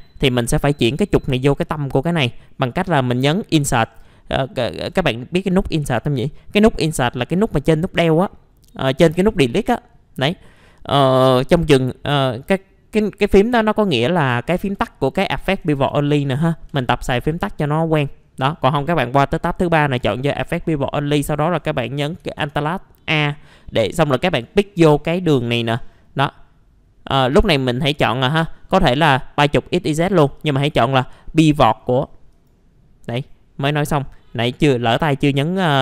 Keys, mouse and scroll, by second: 4.9 Insert, 14.0 click, 14.7 Insert, 20.0 click, 22.2 alt+a, 24.2 click.